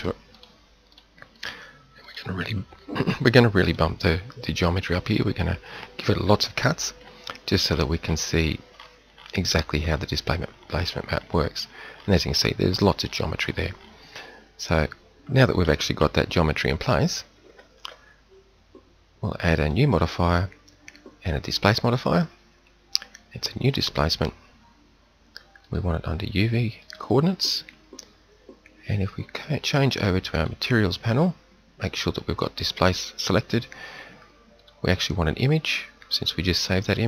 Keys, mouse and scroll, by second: 6.9 z, 8.0 middle click, 8.9 middle click, 9.7 middle click, 10.3 middle click, 10.9 middle click, 11.5 middle click, 12.0 middle click, 12.6 middle click, 12.9 middle click, 13.1 middle click, 16.6 Tab, 17.3 z, 17.7 Tab.